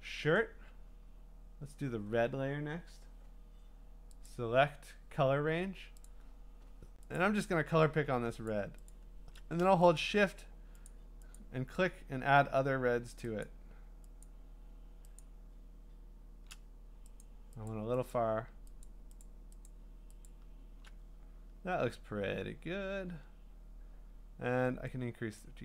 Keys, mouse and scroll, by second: 4.3 click, 6.1 click, 7.2 click, 8.5 shift+click, 8.9 shift+click, 10.0 alt+click, 10.9 alt+click, 11.4 alt+click, 13.4 alt+click, 14.2 alt+click, 15.2 alt+click, 18.8 alt+click, 19.2 alt+click, 19.7 alt+click, 20.2 alt+click, 25.4 click.